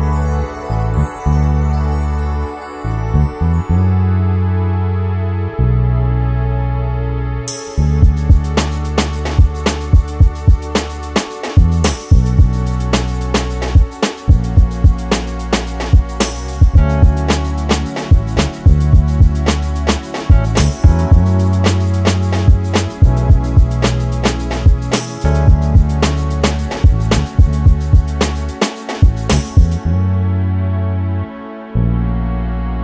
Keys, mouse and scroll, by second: 2.1 click, 2.6 3, 2.9 click, 3.6 e, 5.8 click, 5.9-9.0 middle drag, 6.7 scroll up 2, 7.2 r, 9.0 click, 9.1 s, 10.9 click, 11.1-20.4 middle drag, 11.9 scroll down 1, 13.5 scroll up 2, 13.7-14.1 scroll down 1, 15.9 scroll up 2, 17.7-18.3 scroll up 1, 18.3 shift+z, 18.6 scroll up 1, 19.8 1, 20.0-20.4 scroll up 1, 20.4 click, 21.9 click, 22.1-22.4 scroll up 1, 22.4 click, 23.6 shift+click, 24.1 s, 25.2 click, 25.3-27.1 middle drag, 25.7-26.4 scroll down 3, 26.1 z, 26.9 Tab, 27.1 click, 27.3-30.7 middle drag, 27.7 scroll down 2, 30.3 KP_7, 30.7 scroll up 1, 31.5 shift+a.